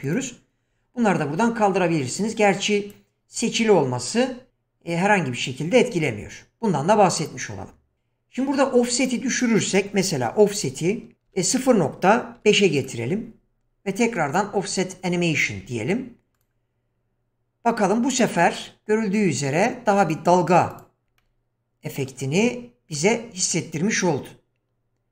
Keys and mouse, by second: 0.1 click, 2.1-2.9 drag, 7.2 click, 9.1-12.9 drag, 14.3 click, 16.3 click, 20.0 click, 20.7 click, 21.2-22.0 middle drag, 22.9 click.